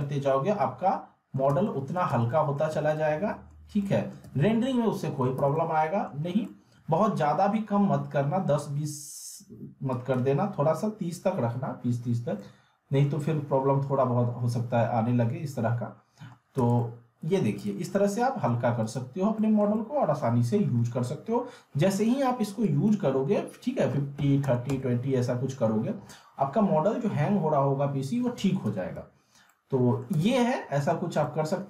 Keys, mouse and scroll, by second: 0.0-1.6 alt+middle drag, 1.5 z, 2.7 z, 3.0-3.6 alt+middle click, 3.7 alt+scroll up 2, 3.9-4.4 alt+middle click, 4.3 z, 4.9 alt+middle click, 5.4 z, 5.5-6.2 alt+middle click, 6.2 scroll up 1, 6.5-7.1 alt+middle drag, 9.9 click, 12.4-13.3 alt+middle click, 13.6 scroll up 1, 16.1 scroll down 1, 16.6 z, 16.8-17.4 alt+middle click, 17.6 click, 18.2-18.5 middle click, 18.8 click, 19.3 middle click, 19.7-20.7 alt+middle drag, 22.6 click, 28.6 z, 29.5-30.1 alt+middle click, 30.1 z, 30.3-30.9 alt+middle click, 31.1 scroll up 1, 31.3 alt+middle click.